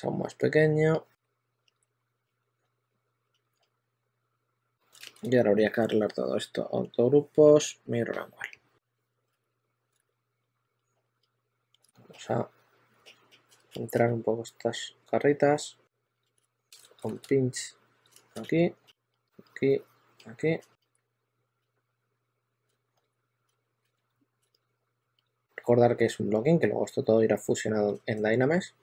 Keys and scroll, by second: 0.9-4.6 typing, 4.8 super+a, 8.9-9.7 typing, 9.8 super+z, 11.5-14.3 typing, 16.2 shift+1, 16.9 ·, 18.0 shift+1, 18.2 s, 20.1-22.0 typing, 22.6 super+z, 23.4 super+z, 23.5 2.